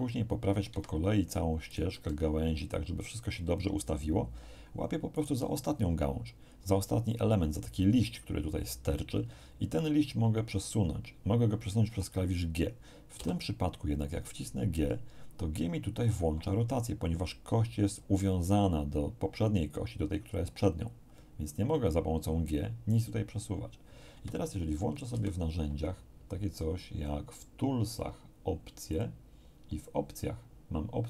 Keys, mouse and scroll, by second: 0.7 Escape, 1.6 click, 1.9 r, 2.6 click, 5.1 right click, 13.1 g, 24.1 Escape, 25.1 t, 27.5-27.9 scroll down 2, 28.9 click.